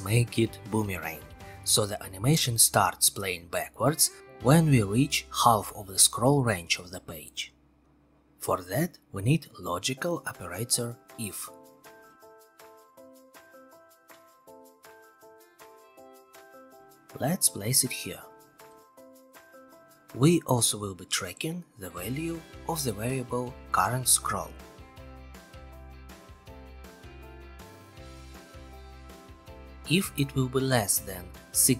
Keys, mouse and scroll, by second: 1.6 click, 5.4 click, 7.3-8.3 scroll, 9.5 click, 11.7 click, 12.5 click, 14.0 click, 15.0 click, 16.5 click, 17.7 click, 20.0-21.1 drag, 22.1-23.2 drag, 24.4 click, 26.9 click, 29.0 click, 29.8 click.